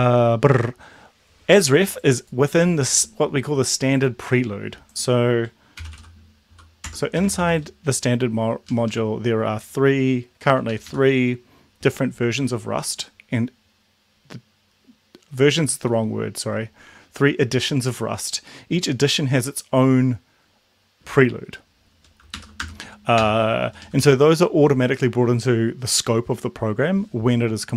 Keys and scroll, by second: 5.6-7.2 typing, 6.8 Tab, 8.7 Down, 8.9 Down, 10.7 Up, 10.9 Up, 12.5 Down, 12.6 Down, 22.4 shift+Home, 22.6 BackSpace, 23.6 Down, 23.8 Down, 24.0 Down.